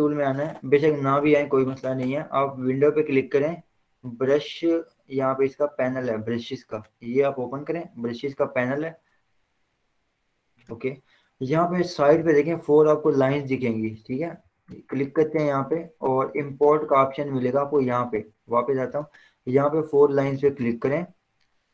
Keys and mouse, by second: 1.4 v, 3.1 click, 7.2 click, 10.1-13.9 drag, 13.9 alt+s, 15.2 click, 19.2 click.